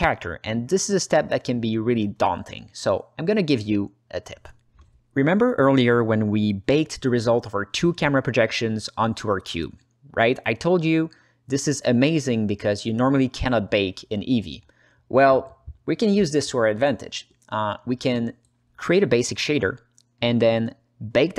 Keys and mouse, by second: 1.0 right click, 1.4-2.0 alt+middle drag, 2.2 click, 3.1 ctrl+alt+middle drag, 3.6 middle click, 3.9 alt+shift+middle drag, 4.4 alt+middle click, 7.9 alt+middle click, 9.0 click, 10.2-11.2 alt+middle drag, 13.2 alt+shift+middle click, 13.4 ctrl+alt+middle click, 13.9 ctrl+space, 14.3 ctrl+alt+middle click, 14.7 alt+shift+middle click, 15.4 alt+click, 20.8 alt+middle click.